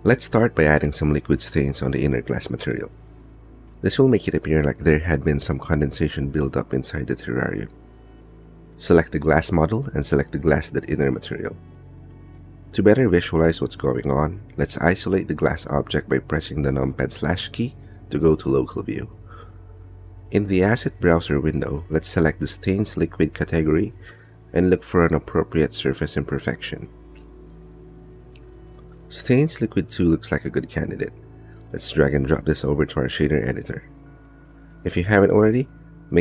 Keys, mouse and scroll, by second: 16.9 KP_Divide, 17.8 z, 20.5-23.6 middle drag, 23.6 click, 26.3-28.9 drag, 30.1 click, 30.9 middle click, 31.7 click, 33.5 middle click, 33.9-36.2 drag.